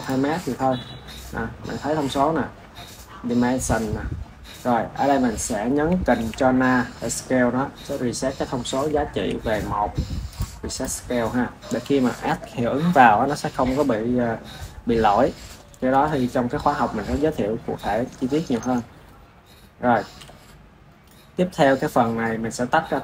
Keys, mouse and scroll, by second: 0.3-1.2 scroll up 14, 5.1 scroll up 2, 6.0 ctrl+a, 9.0 ctrl+a, 10.6 click, 20.1 n, 21.0 click.